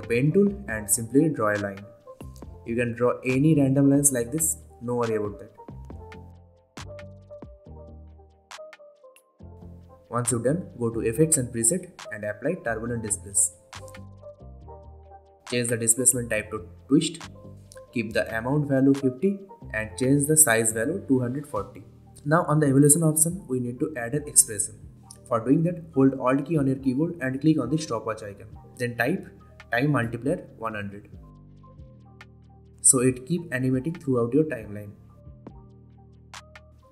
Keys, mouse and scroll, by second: 6.6 v, 6.8 click, 11.3-12.9 typing, 14.1 click, 20.1 click, 22.8 Return, 26.5 alt+click, 28.9-30.0 typing, 32.1-36.8 drag.